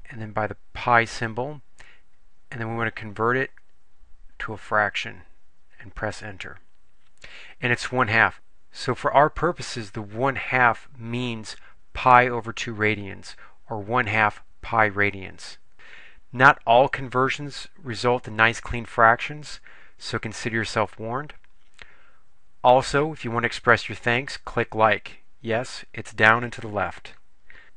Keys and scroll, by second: 0.7 ^, 4.5 Return, 6.1 Return.